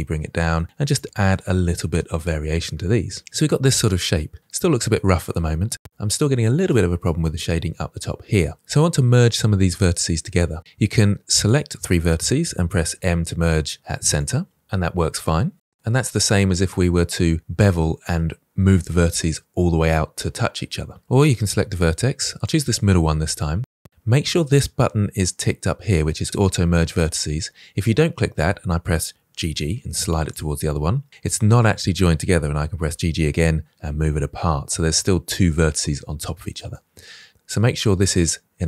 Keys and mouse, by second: 0.2 click, 0.3 g, 0.4 g, 0.7 click, 0.9 middle click, 1.6 g, 1.7 g, 2.0 click, 2.2-4.1 middle drag, 4.4 middle click, 5.7 middle click, 8.7 middle click, 11.0 click, 12.8 m, 15.0 middle click, 21.0 middle click, 29.3 g, 29.4 g, 30.2-32.3 drag, 32.7 g, 32.8 g, 36.5-38.6 drag.